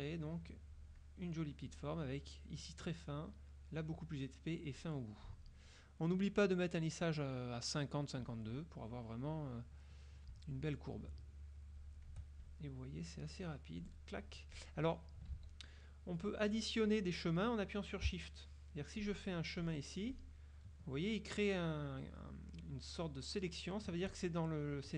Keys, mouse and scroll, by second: 10.6-12.3 shift+drag, 13.2-14.1 shift+drag, 15.4 ctrl+z, 19.1 shift+click, 19.7 shift+click.